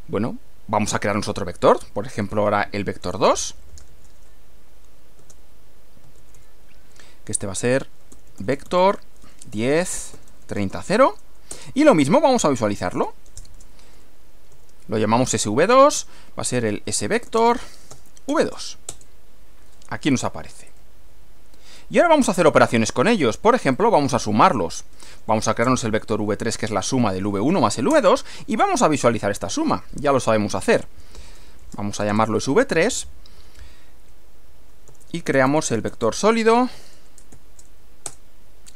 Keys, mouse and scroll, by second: 2.8-3.9 typing, 5.2 space, 6.0 shift+v, 7.2-10.9 typing, 11.5 Return, 12.4-14.5 typing, 16.0-18.9 typing, 20.7 click, 21.5-22.7 middle drag, 23.7 click, 24.8-28.0 typing, 30.8-32.3 typing, 34.4-37.8 typing, 38.1 Return.